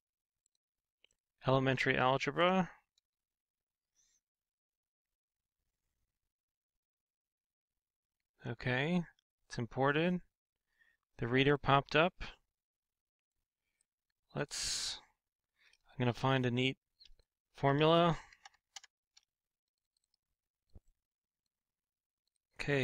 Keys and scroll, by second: 16.2 BackSpace, 17.8-18.3 typing.